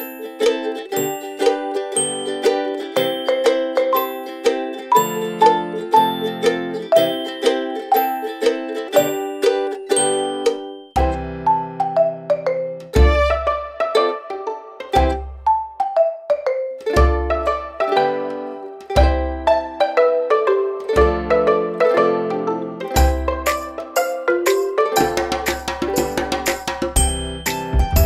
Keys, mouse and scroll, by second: 2.8 click, 22.5 alt+click, 25.8 shift+click.